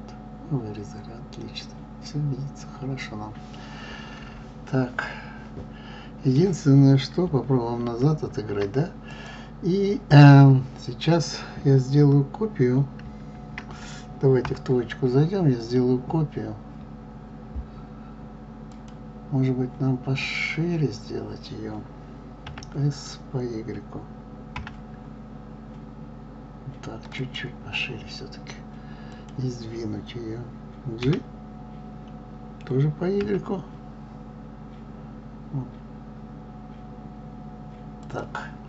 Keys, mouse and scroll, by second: 9.0 click, 14.1 KP_3, 18.7 click, 22.4 s, 29.1 click, 31.0 g.